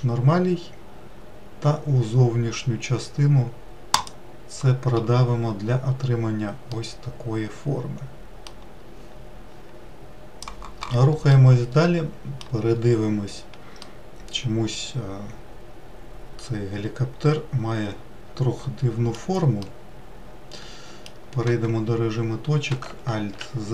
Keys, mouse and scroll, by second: 0.0-1.1 right drag, 7.2-10.3 middle drag, 12.0-13.3 middle drag, 13.3-14.0 scroll down 3, 14.5-17.5 middle drag, 20.3-22.1 middle drag, 22.1 1.